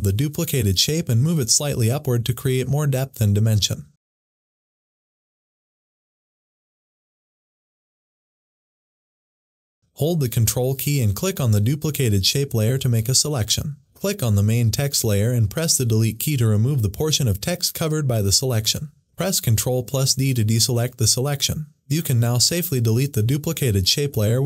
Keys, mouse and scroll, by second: 2.3 Up, 5.4 click, 6.3 Up, 6.9 Return, 7.2 Up, 12.5 Up, 12.6 ctrl+click, 16.1 Delete, 20.1 ctrl+Delete, 20.4 ctrl+d, 22.2 click, 24.2 Delete.